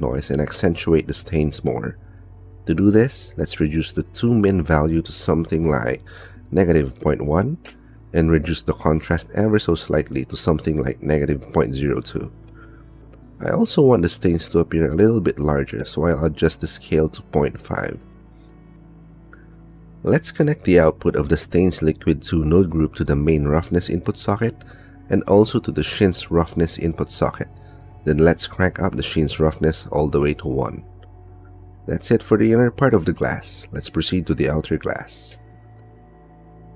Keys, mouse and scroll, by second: 1.3 click, 3.7 click, 7.3 click, 9.8-12.8 drag, 13.9 click, 17.4-18.7 drag, 19.7 click, 20.4 click, 21.7 click, 22.5 click, 23.2 click, 24.0-25.6 drag, 25.9 click, 26.8-28.4 drag, 30.5-31.7 drag, 32.8 click.